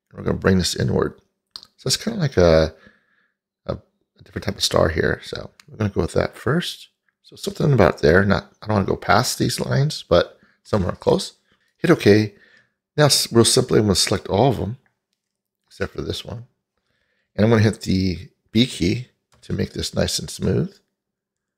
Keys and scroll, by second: 19.4 b.